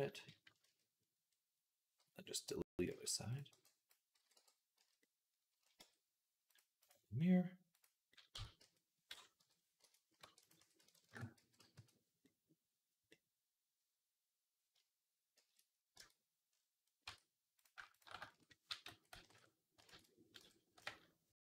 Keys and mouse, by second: 0.5 ctrl+z, 2.5 click, 2.7 z, 3.2-6.4 middle drag, 3.3 b, 4.0 x, 4.6 z, 5.6 Tab, 6.4 click, 6.5 middle click, 6.7-8.2 drag, 8.2 Tab, 8.4 a, 10.1 e, 10.4 s, 11.2-17.5 drag, 11.2 x, 15.2 shift+c, 15.8 Tab, 16.9 Tab, 17.5 shift+middle click, 17.8 alt+shift+click, 17.8 alt+shift+middle click, 18.5 a, 18.7 s, 19.7 ctrl+z, 20.2 ..